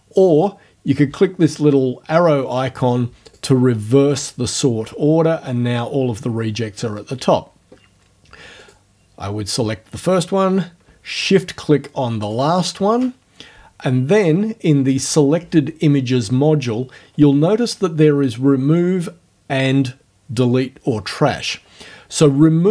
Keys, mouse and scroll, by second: 3.3 click, 4.1 scroll up 2, 8.6 click, 12.3 shift+click.